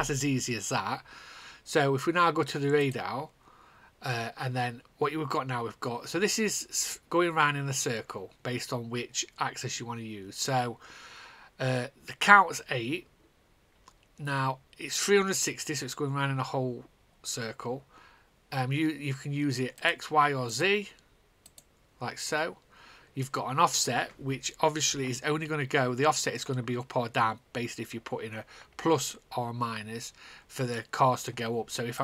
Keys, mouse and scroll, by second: 3.7-5.9 drag, 20.6 click.